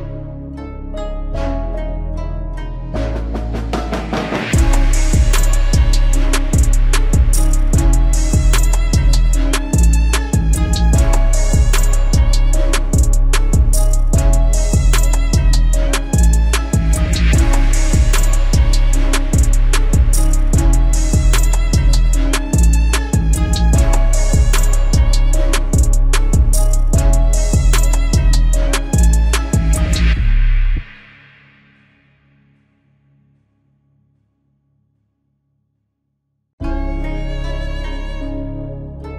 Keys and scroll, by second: 2.1 ctrl+z, 8.2 ctrl+z.